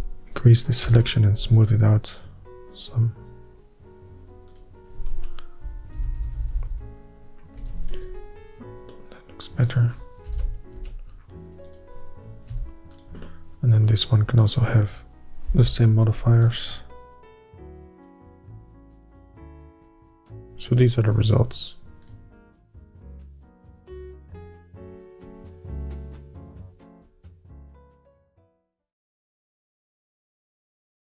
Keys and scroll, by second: 5.8-6.8 typing, 7.7 alt+a, 8.1 Tab, 10.4 alt+h, 10.9 alt+a, 13.8 h, 15.6 ctrl+l, 18.9 alt+a, 20.1 alt+a.